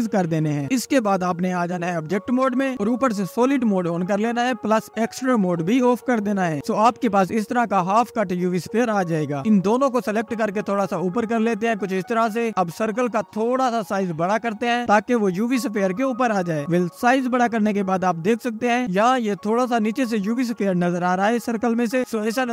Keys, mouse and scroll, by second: 1.6 Tab, 2.1-3.4 drag, 3.8 scroll up 3, 4.1 click, 5.5 click, 6.3 a, 6.5-7.3 scroll down 1, 7.3 click, 8.7-10.1 drag, 12.8-13.8 scroll down 1, 13.8 click, 15.6 s, 18.2 click, 18.7 middle click, 20.9-21.9 scroll up 3.